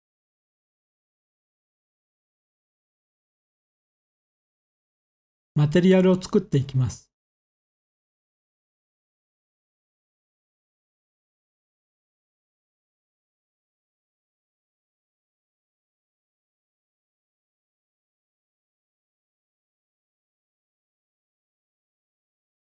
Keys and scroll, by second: 5.7 ctrl+s, 15.9-17.6 typing, 19.1 Return.